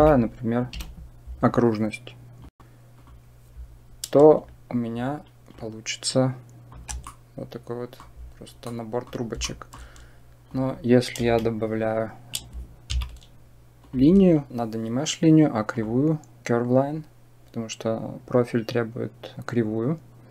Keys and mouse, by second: 5.4-6.6 shift+drag, 7.0 middle click, 8.5 middle click, 9.3 shift+middle click, 10.4 click, 11.1 Delete, 12.8 shift+a.